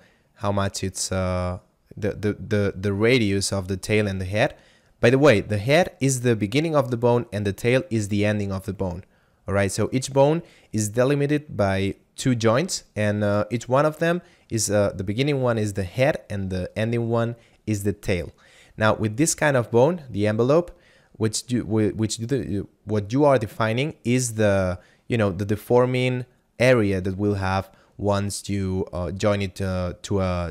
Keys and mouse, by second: 2.7 click, 19.2 click.